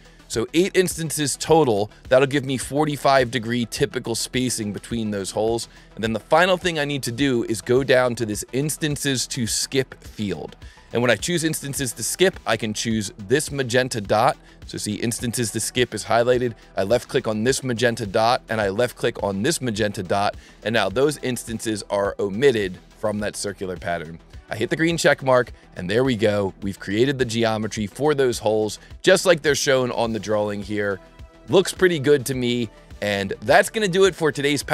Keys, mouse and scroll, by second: 10.2 click, 11.3 click, 12.1 click, 14.5 click, 17.4 click, 19.7 click, 24.7 click, 25.3 click, 25.9-27.0 middle drag, 27.0-27.4 scroll up 4, 27.4 scroll down 1, 28.7-30.5 drag, 31.1 click, 32.4 click, 33.7 click.